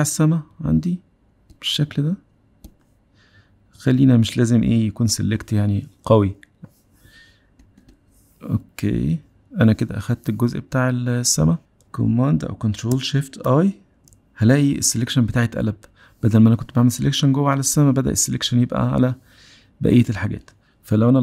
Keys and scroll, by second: 13.9 shift+super+i.